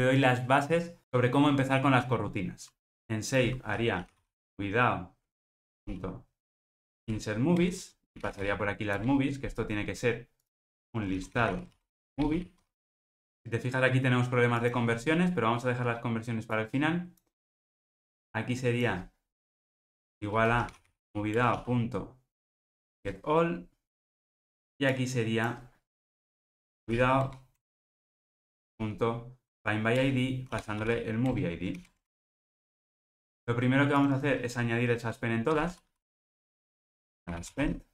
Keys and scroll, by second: 5.6 Return, 21.3 Return, 30.0 Return, 31.7 alt+super+l, 32.0 ctrl+alt+o, 35.4 ctrl+g.